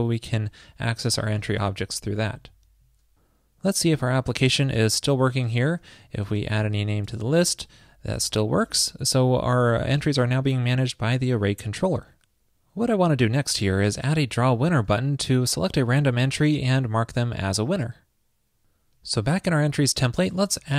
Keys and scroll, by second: 0.0 alt+shift+Right, 1.1 super+Right, 1.4 super+s.